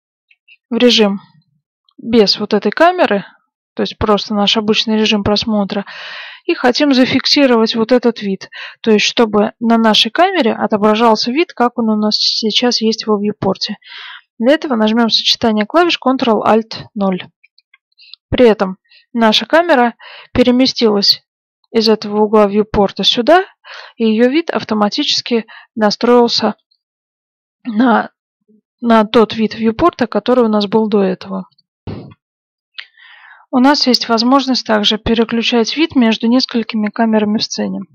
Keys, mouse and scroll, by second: 8.3 middle click, 11.6-13.5 middle drag, 17.4 ctrl+alt+KP_0, 23.5-25.5 middle drag, 31.9 F9, 31.9 middle click, 36.6-37.9 middle drag.